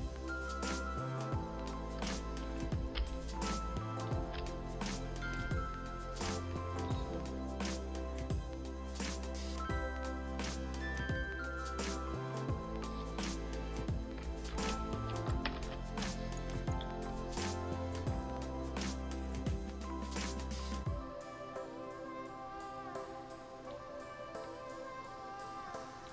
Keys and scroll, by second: 9.0 ctrl+alt+s, 9.7 ctrl+alt+shift+Return, 10.4 ctrl+alt+shift+Return, 11.8 ctrl+alt+shift+Return, 14.5 ctrl+-, 14.9 ctrl+-, 15.3 ctrl+=, 15.5 ctrl+=.